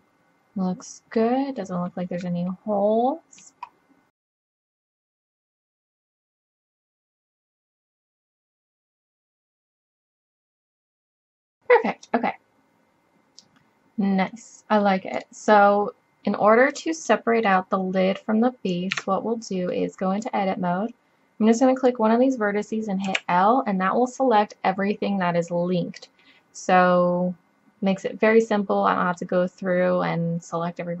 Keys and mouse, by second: 0.2-0.7 middle drag, 2.9 middle click, 3.7 middle drag, 5.1 click, 5.1 middle click, 5.5 click, 5.9 click, 6.3 click, 6.7 click, 7.9 middle click, 8.4 click, 8.8 click, 9.0 middle click, 9.2 middle click, 9.9 click, 10.7 click, 11.6 drag, 12.0-12.6 drag, 12.6-14.5 middle drag, 15.2-16.4 middle drag, 16.7-18.9 middle drag, 19.0 Tab, 23.1 l, 28.2 middle click.